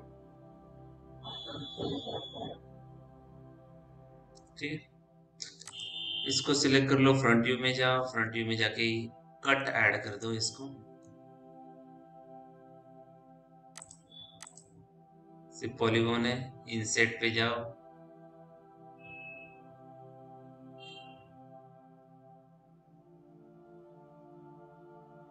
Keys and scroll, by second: 6.5 f.